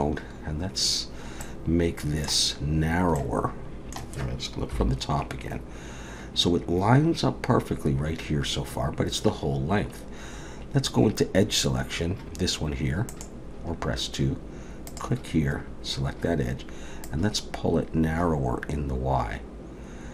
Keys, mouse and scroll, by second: 1.4 middle click, 3.2 middle click, 4.7 KP_7, 13.1 click, 14.9 click, 17.0 click.